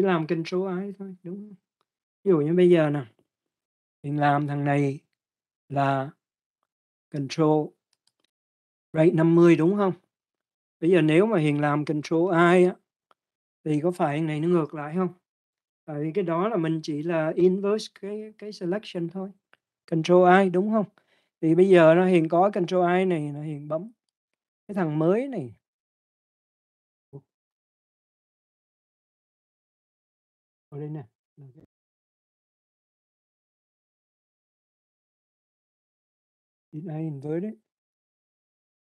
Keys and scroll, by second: 13.0 ctrl+i.